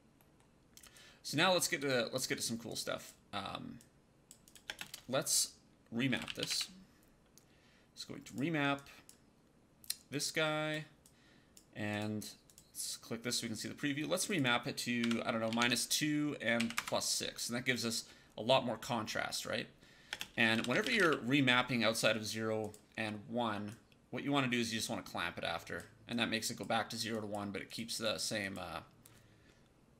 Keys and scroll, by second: 4.5 space, 5.7-6.9 typing, 14.9 KP_Subtract, 15.4 KP_2, 15.5 Tab, 16.5 KP_6, 16.6 Return, 20.0-21.4 typing.